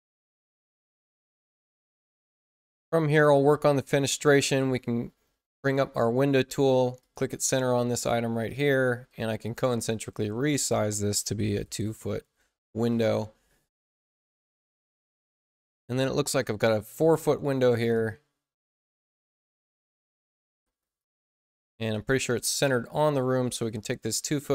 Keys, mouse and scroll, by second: 0.9 click, 6.9 click, 7.8 space, 8.3 click, 9.0 c, 9.4-10.6 drag, 10.3 Return, 11.5 ', 14.8 click, 17.8 click, 20.3 click, 20.9 click, 21.4-22.2 typing, 22.3 click, 23.7 click.